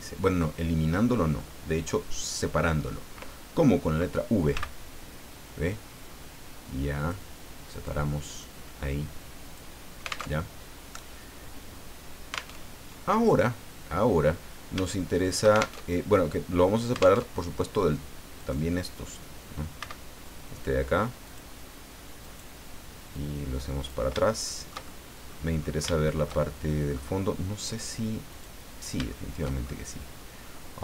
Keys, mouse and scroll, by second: 4.5 v, 7.0 click, 7.7 right click, 8.4-9.7 drag, 10.2 alt+Tab, 12.5 alt+Tab, 15.7 alt+shift+Tab, 17.1 alt+Tab, 18.4 right click, 19.8 v, 21.2 click, 22.2 right click, 23.1 click, 24.3-25.4 shift+middle drag, 25.6 scroll up 2, 25.9-27.1 shift+middle drag, 28.3 click, 29.1 shift+middle click.